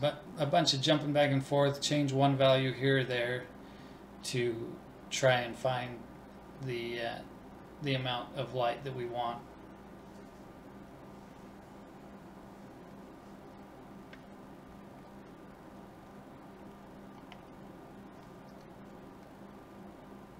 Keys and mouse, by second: 0.5 click, 0.7-18.0 middle drag, 18.0 click, 19.4 click.